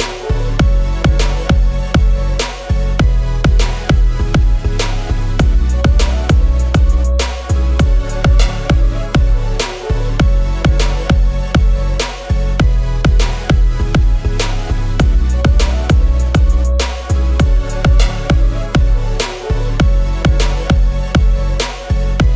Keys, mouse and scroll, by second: 13.4 shift+click, 16.7 double click, 17.2 Down, 17.8 Return.